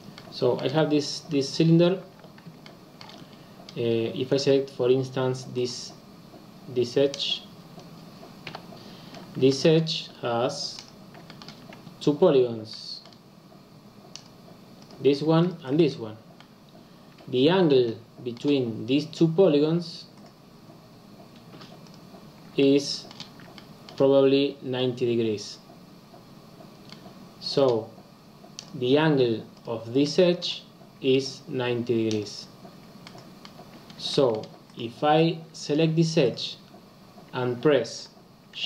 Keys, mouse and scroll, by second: 0.2-2.0 middle drag, 2.0 Tab, 2.7 shift+middle click, 3.2-6.3 scroll up 4, 8.4 click, 8.5 KP_Decimal, 9.1-9.4 scroll down 3, 9.4 shift+scroll up 1, 9.5-10.8 shift+middle drag, 10.8 click, 11.3-14.1 shift+middle drag, 14.1 click, 14.9 click, 15.5 shift+click, 16.3-19.9 middle drag, 21.9 click, 22.6-28.6 shift+middle drag, 28.6 click, 29.6 click, 30.0-32.2 middle drag, 32.2 click, 33.1 middle click, 33.4-34.1 scroll down 2, 34.1-38.6 shift+middle drag.